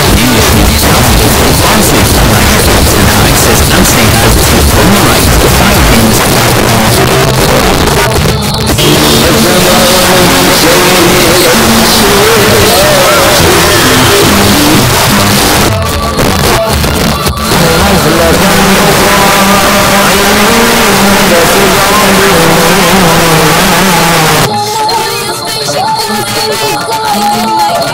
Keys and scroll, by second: 6.1 Page_Down, 14.8 Page_Down, 23.5 Page_Down.